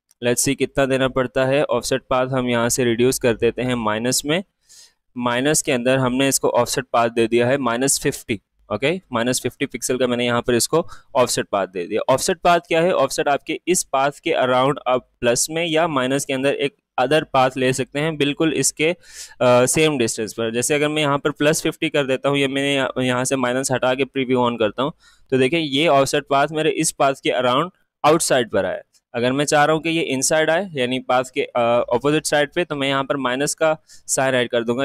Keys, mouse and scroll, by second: 2.0 Down, 9.7 click, 16.3 click, 19.1 click, 20.4 click, 23.7 click, 29.7 click, 30.5 Left, 34.1 click.